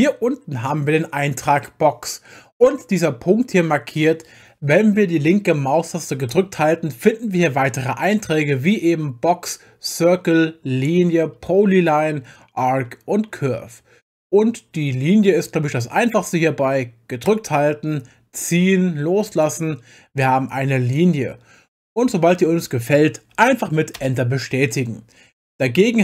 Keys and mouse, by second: 6.3-16.2 drag, 17.2 click, 24.0 Return, 25.5-26.0 drag.